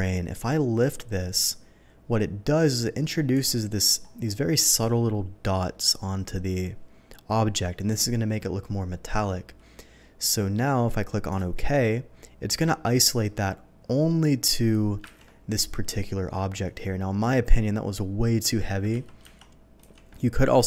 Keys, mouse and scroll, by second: 4.0-4.3 scroll up 2, 6.3-7.3 scroll down 1, 11.3 click, 15.0 ctrl+d, 19.0 ctrl+z, 19.2 ctrl+z, 19.8 ctrl+d.